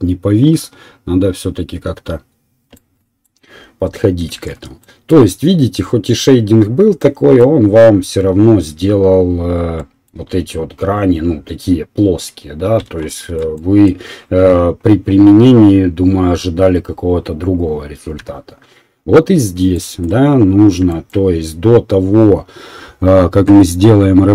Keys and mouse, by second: 1.8-10.5 middle drag, 13.8-19.2 drag, 18.9 Delete, 22.5-24.3 right drag.